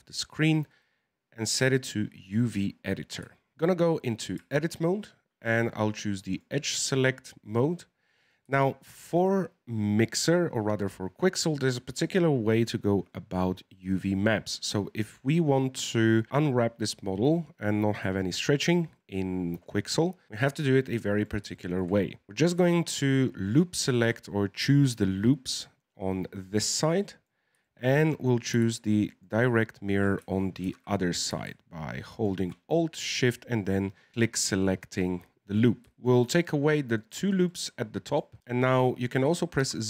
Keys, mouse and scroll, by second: 2.3-3.3 scroll up 4, 3.3 scroll up 1, 3.3-4.4 shift+middle drag, 4.4 Tab, 6.2 click, 8.1-11.7 middle drag, 20.7-21.9 middle drag, 21.9-22.3 scroll up 1, 22.3 right click, 23.0 alt+shift+right click, 23.4 alt+shift+right click, 27.0-29.1 middle drag, 29.1 alt+shift+right click, 30.6 ctrl+z, 32.1 alt+shift+right click, 33.4-34.9 middle drag, 34.9-35.3 scroll up 2, 35.3-35.9 scroll down 1, 35.9 shift+right click, 36.9 shift+right click, 37.4 middle click, 38.2-39.6 scroll down 1, 39.6 z.